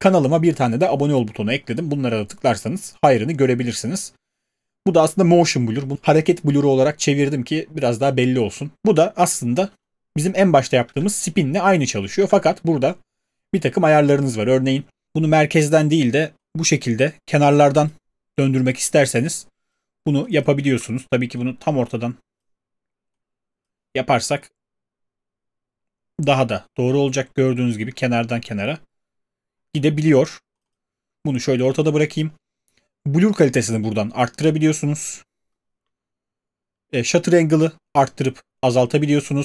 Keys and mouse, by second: 10.8 space, 12.2 space.